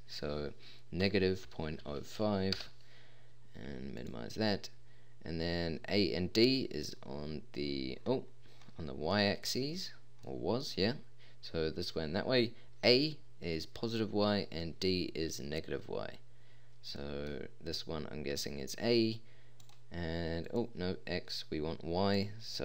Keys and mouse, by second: 10.5 typing.